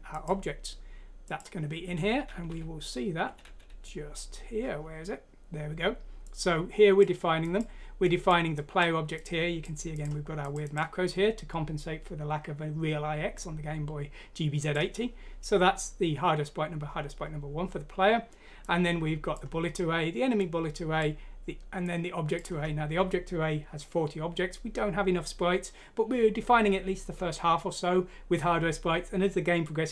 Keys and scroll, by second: 2.5 Page_Down, 3.2 Page_Down, 3.4 Page_Down, 3.7 Page_Down.